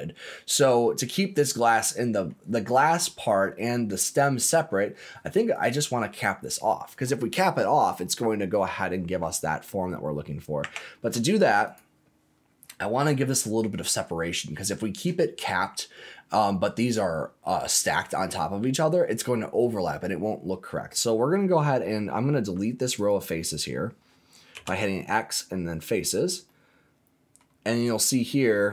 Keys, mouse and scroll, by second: 0.7-2.2 middle drag, 2.3-3.3 scroll down 5, 3.3 middle click, 4.3-5.3 scroll up 5, 5.5 click, 10.6 Tab, 11.6 click, 12.3 scroll down 1, 12.7-14.7 middle drag, 17.8 scroll down 2, 18.1-19.8 middle drag, 20.0 scroll up 1, 22.9 alt+click, 24.5 x, 25.8-26.4 scroll up 4, 26.4 middle click, 27.4 scroll down 1, 27.7-28.7 middle drag.